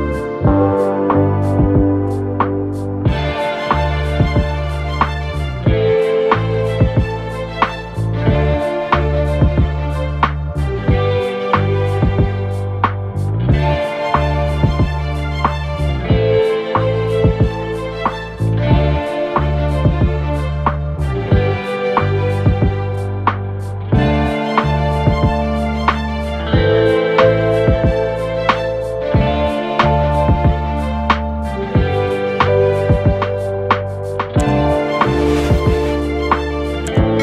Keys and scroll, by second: 3.3 alt+shift+Return, 22.7 Return.